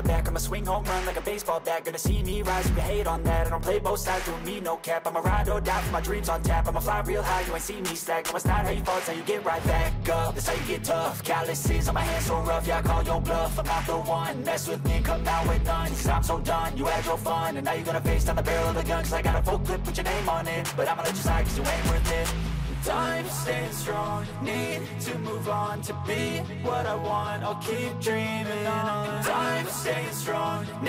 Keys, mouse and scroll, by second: 5.4 scroll down 1, 10.1 1, 10.4 0, 10.7 Return, 12.9 ctrl+a, 14.1-16.5 typing, 17.8 ctrl+a, 19.9 0, 20.5 Return.